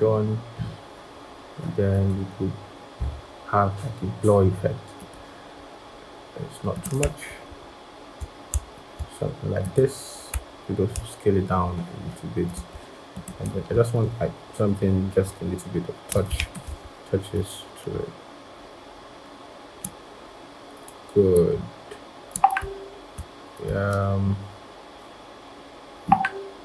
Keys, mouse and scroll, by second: 7.1 shift+Down, 7.3 shift+Down, 8.5 shift+Up, 10.7 shift+click, 13.9 alt+click, 16.4 ctrl+shift+], 23.7 alt+click.